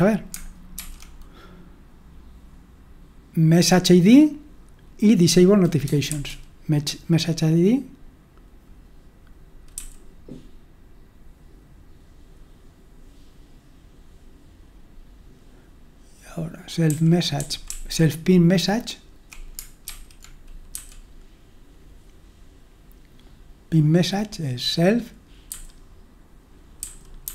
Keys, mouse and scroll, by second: 9.7 typing, 17.1-18.8 typing, 19.8-20.7 typing.